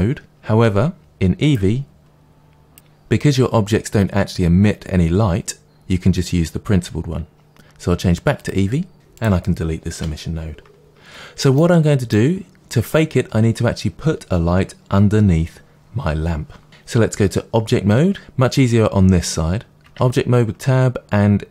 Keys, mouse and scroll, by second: 1.9 click, 2.6 click, 2.7-8.3 middle drag, 8.3 click, 8.9 ctrl+s, 8.9 click, 9.9 Delete, 11.5-21.5 middle drag, 20.6 Tab.